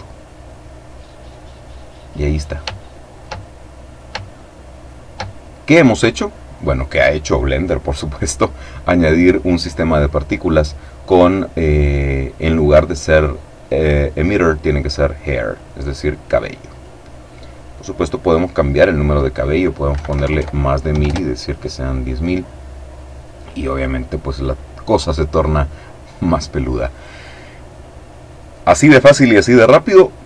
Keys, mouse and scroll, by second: 0.3-1.0 scroll up 2, 1.1-2.6 middle drag, 2.9 shift+middle click, 3.8 shift+middle click, 6.0-7.1 drag, 7.6 click, 12.5 click, 14.9 click, 16.1 click, 17.4 click, 19.4 Right, 20.4 KP_Enter, 22.8-24.5 middle drag, 24.5-24.9 scroll down 1, 25.0-25.7 scroll down 1.